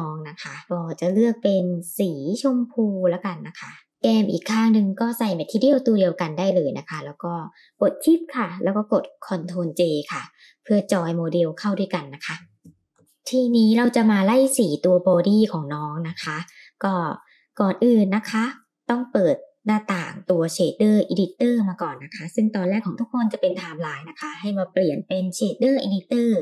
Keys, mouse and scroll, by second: 1.4 click, 4.2 click, 5.0-6.1 drag, 6.7 shift+click, 11.5 ctrl+j, 12.4-13.0 middle drag, 13.0-26.4 drag.